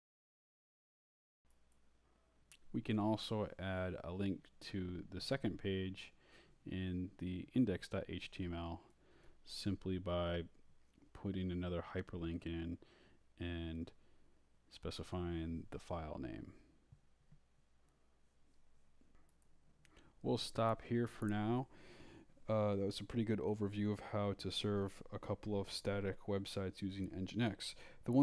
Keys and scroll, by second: 0.0-2.3 typing, 3.0 Return, 3.5 Down, 5.6-8.3 typing, 9.4-15.2 typing, 15.6 shift+Left, 17.3 Return, 17.4 Up, 17.9 Down, 19.3 Up, 19.5-27.4 typing.